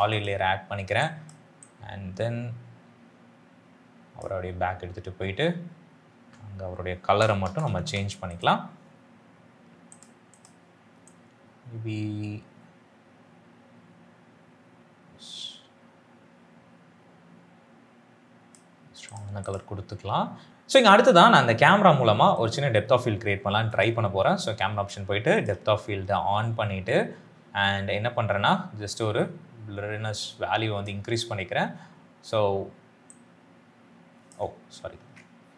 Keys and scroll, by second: 6.0 ctrl+space, 7.0 f, 7.3 i, 7.6 l, 34.9 ctrl+z.